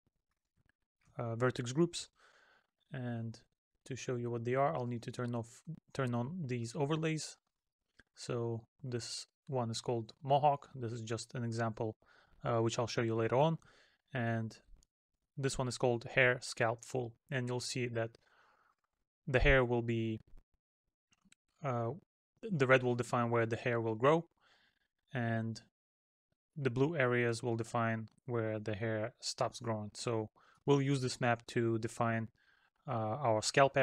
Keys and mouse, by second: 0.7 middle click, 7.4 middle click, 10.8 middle click, 14.3 middle click, 17.2 middle click, 19.9 middle click, 24.7 middle click, 26.6 middle click, 29.3 middle click.